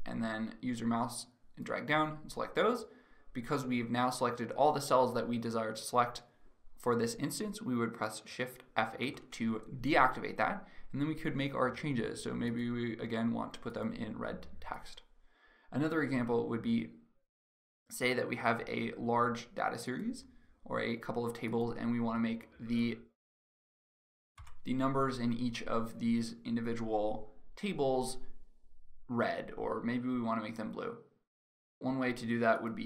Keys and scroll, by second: 8.6 shift+F8, 23.8 F9.